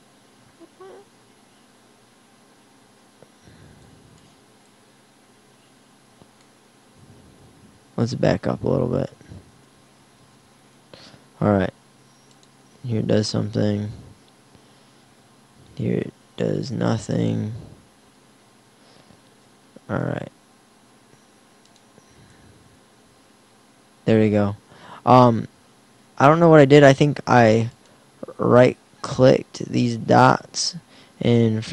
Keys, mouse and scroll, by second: 7.7 ctrl+z, 8.0 ctrl+z, 8.3 ctrl+z, 9.1 ctrl+z, 9.2-10.5 ctrl+z, 11.6 r, 12.5 click, 13.5 ctrl+z, 13.6 ctrl+z, 13.7 ctrl+z, 15.1 r, 18.0 ctrl+z, 18.1 ctrl+z, 20.1 r, 24.2-27.8 middle drag, 29.7 middle click, 30.3 e, 31.6 r.